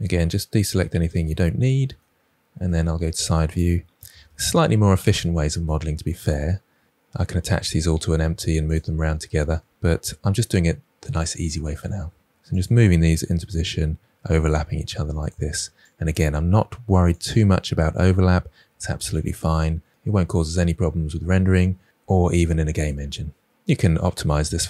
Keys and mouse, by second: 1.2-1.9 middle drag, 2.6 KP_3, 4.1 shift+d, 5.1 click, 6.5 g, 8.3 r, 8.8 click, 8.9 g, 9.4 click, 9.6 r, 10.0 g, 12.7 click, 14.3-15.0 middle drag, 15.0 KP_3, 15.6 r, 15.9 g, 17.3 click, 18.8 r, 19.7 middle drag, 21.6-21.9 middle drag, 22.3 KP_3, 23.0 r, 23.5 g, 24.2-24.5 middle drag.